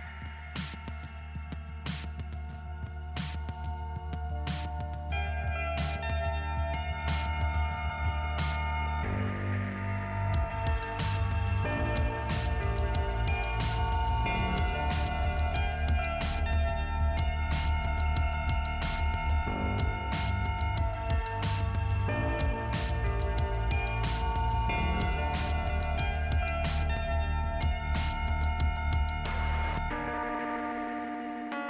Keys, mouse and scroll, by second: 0.0 click, 10.4 click, 12.6 click, 12.7 click, 13.8 middle click, 15.4-16.0 scroll up 2, 23.8 alt+Delete, 23.9 click, 24.2 click, 24.3 click, 25.5 click, 26.3 click, 26.5 click, 29.1 click, 30.6 click.